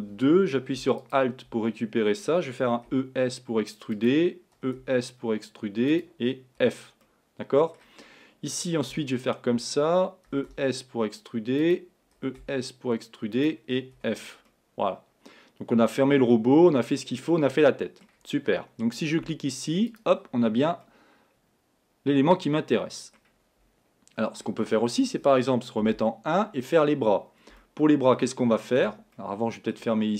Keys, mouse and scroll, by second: 1.1 click, 2.7 e, 4.6 e, 6.6 f, 7.1-9.2 middle drag, 14.8-17.6 middle drag, 20.6 scroll, 20.9-23.7 middle drag, 26.8-27.6 scroll down 2, 27.6-30.0 middle drag, 30.0-30.1 scroll up 2.